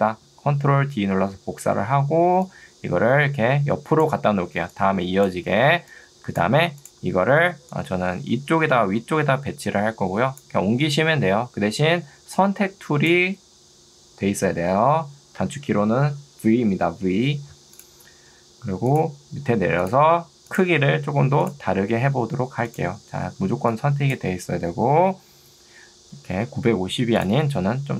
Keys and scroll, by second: 0.7 ctrl+d, 4.7 2, 5.7 Escape, 12.1 2, 23.7 2, 24.5 Escape.